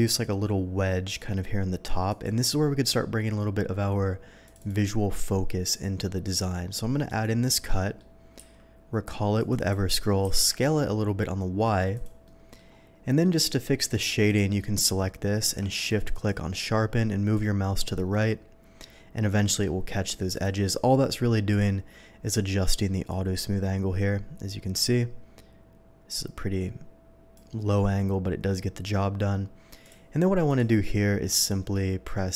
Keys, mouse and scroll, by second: 0.0-1.0 drag, 2.1 click, 4.4 click, 4.6 click, 4.8-5.2 middle drag, 7.0 click, 7.7 middle drag, 8.4 q, 9.4 click, 9.5 click, 10.2 s, 10.4 y, 10.6 s, 11.9 click, 12.2-12.5 middle drag, 13.0 middle drag, 13.8 middle drag, 14.2 click, 15.4 q, 16.0 shift+q, 16.1 shift+click, 20.3 click, 21.5 click, 22.2 click, 23.1-27.3 drag, 27.8-28.5 middle drag, 29.8 click, 30.4 click, 31.3 click, 31.7-32.3 middle drag.